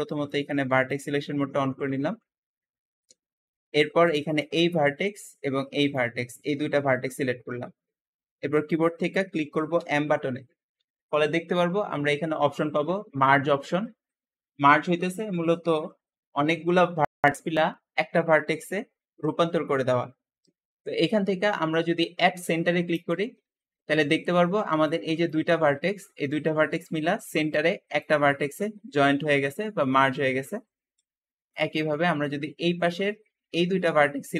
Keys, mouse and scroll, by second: 0.0-1.6 drag, 1.6-3.0 scroll up 1, 3.0-4.2 middle drag, 4.2 click, 5.7 shift+click, 9.7 m, 24.4 `, 30.9 Escape, 31.5-32.8 middle drag, 32.8 scroll up 2, 33.4 shift+middle click, 34.1 shift+click.